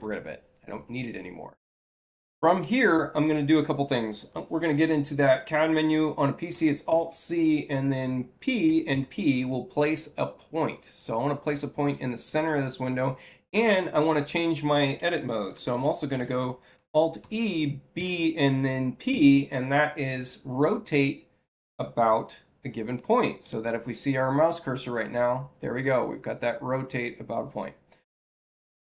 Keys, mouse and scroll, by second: 6.8 c, 8.6 p, 8.8 p, 12.1 click, 17.1 e, 17.9 b, 19.0 p, 26.0 6.